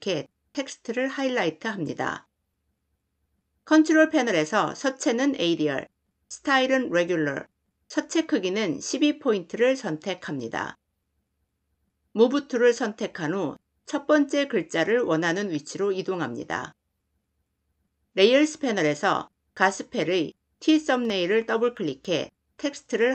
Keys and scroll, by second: 12.0 v.